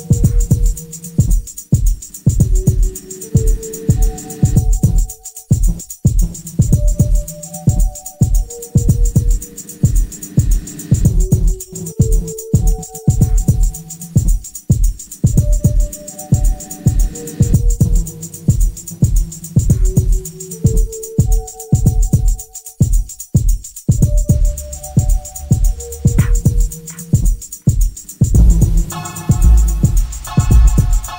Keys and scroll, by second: 9.5 4, 15.2 2, 16.4 [, 16.5 ], 18.3 ], 21.4 4, 23.2 ctrl+z, 24.5 2, 25.8 ], 26.0 ], 30.2 3, 30.7 4.